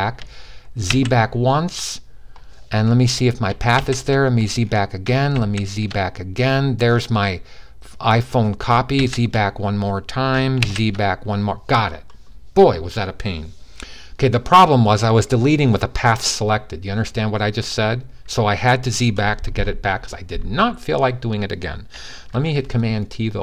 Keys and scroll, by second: 0.6 alt+super+z, 3.5 alt+super+z, 5.1 alt+super+z, 5.2 alt+super+z, 8.5 super+z, 10.4 alt+super+z, 22.0 super+t.